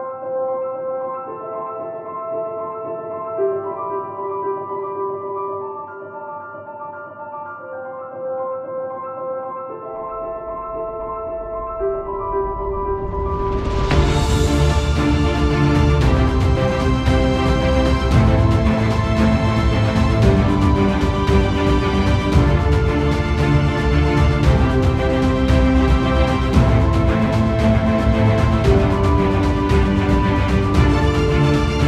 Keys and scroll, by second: 21.0 ctrl+z, 26.9 ctrl+alt+=, 27.9 space.